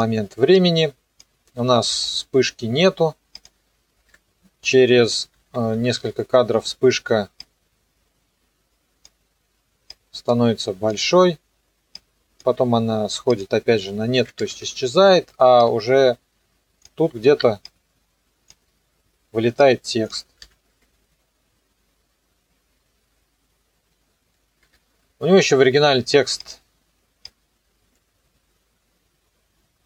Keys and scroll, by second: 1.9 i, 3.9 KP_0, 4.1 KP_Enter, 5.3 Page_Down, 14.0 KP_0, 14.1 KP_Enter, 20.4 n, 20.7 KP_0, 24.6 KP_0.